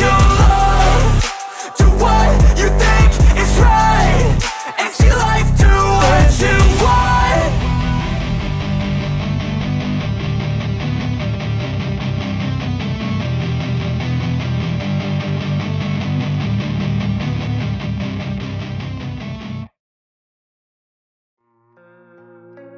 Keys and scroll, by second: 0.2-2.3 typing, 3.5 /, 3.9 KP_2, 4.6 ctrl+s, 4.9 Down, 5.2 Left, 5.6 Left, 5.9 Left, 6.5 v, 18.7-20.9 typing, 19.1 KP_Add, 21.0 ctrl+s.